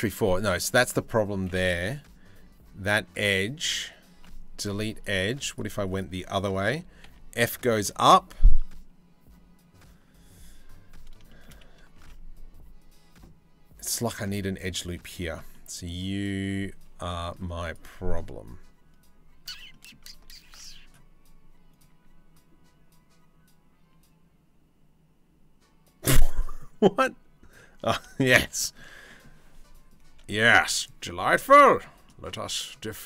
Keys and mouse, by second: 3.8 Delete, 5.6-6.7 drag, 6.7 f, 11.6 ctrl+r, 14.2-19.8 drag, 20.1 ctrl+r, 27.8 shift+middle click, 29.9 shift+middle click, 31.2 middle click, 31.7-33.0 shift+middle drag.